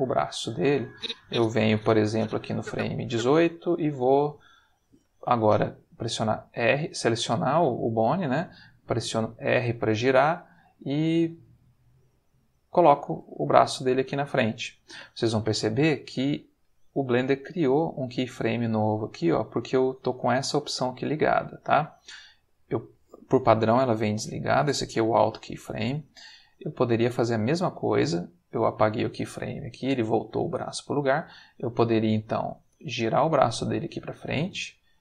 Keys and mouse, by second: 0.9-3.3 drag, 3.9 r, 6.8 click, 8.8 r, 12.9 click, 22.4 click, 24.1 click, 25.1 click, 26.8 click, 27.3 x, 27.6 click, 30.8 r, 31.9 click, 32.6 r, 34.5 click.